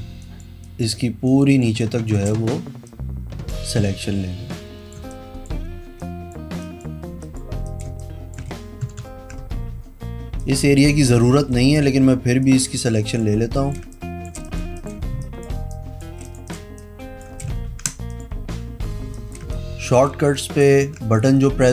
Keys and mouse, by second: 0.3 click, 0.8 click, 1.4 click, 1.8 space, 1.9 click, 3.0 click, 4.6 click, 5.1 space, 5.2 click, 6.1 click, 6.7 click, 7.4 click, 8.0 space, 8.1 click, 9.0 ctrl+KP_Subtract, 10.5 click, 11.7 click, 12.6 click, 12.9 space, 12.9 click, 13.7 click, 13.9 space, 14.1 click, 14.6 click, 14.9 click, 15.1 space, 15.3 click, 16.4 click, 16.6 click, 16.8 space, 16.9 click, 17.8 ctrl+z, 18.2 click, 19.3 click, 19.6 space, 20.0 click, 20.5 click, 21.0 ctrl+z, 21.3 click.